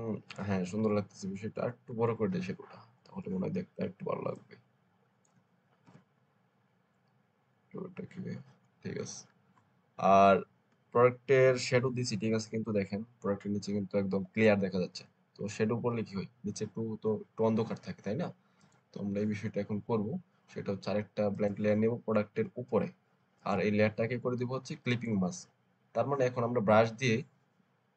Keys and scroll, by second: 2.2 ctrl+alt+t, 5.7 shift+Return, 6.8 Left, 7.1 Left, 7.4 Left.